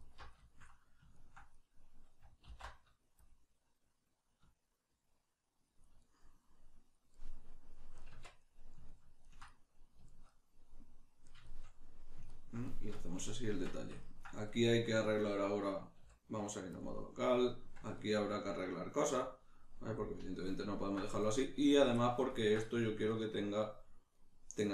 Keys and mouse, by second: 0.0 alt+right click, 0.4-5.8 shift+middle drag, 2.4 alt+e, 5.8 shift+click, 6.0-14.4 middle drag, 8.1 Tab, 13.6 Tab, 14.4 right click, 16.0 q, 17.1-24.6 middle drag, 24.6 right click.